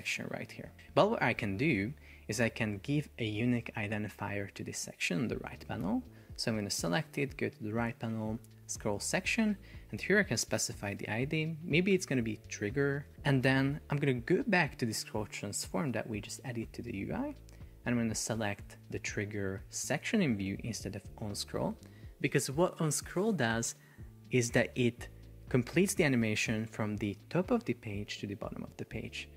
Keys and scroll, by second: 0.8 Escape, 13.1 Return.